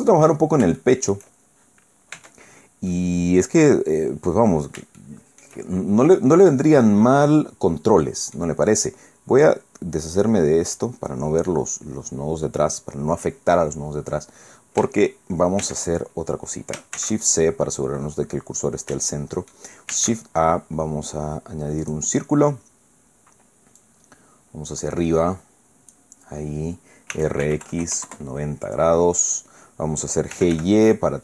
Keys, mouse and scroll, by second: 0.4-0.7 shift+scroll down 1, 0.8 shift+click, 2.1 Tab, 2.9-4.5 drag, 5.0 shift+click, 5.5 shift+scroll up 1, 5.7 shift+scroll down 1, 5.9 shift+middle click, 6.5-8.5 drag, 10.7 click, 13.8-14.3 scroll down 1, 14.3 scroll up 1, 15.6 shift+a, 16.9 shift+c, 17.5-17.8 shift+scroll up 3, 19.1 shift+click, 19.9 shift+a, 21.8 click, 23.8-26.1 drag, 27.1 r, 27.4 x, 27.7 KP_9, 27.8 KP_0, 28.1 KP_Enter, 30.3 g, 30.5 y.